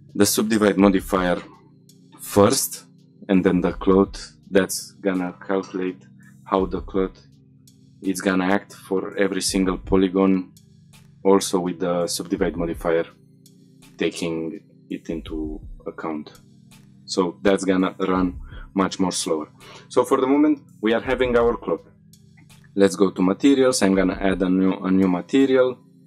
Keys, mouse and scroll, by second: 1.8-2.5 scroll down 4, 2.5-4.0 scroll up 2, 4.0-6.5 scroll up 1, 10.1-11.1 scroll down 3, 11.1-14.4 scroll down 2, 15.5-15.8 scroll up 3, 15.6-16.3 shift+middle drag, 16.5-17.8 shift+middle drag, 16.6-17.1 scroll up 1, 18.3-18.7 scroll down 2, 18.7 middle drag, 19.1 shift+middle click, 22.2 click, 23.0 click.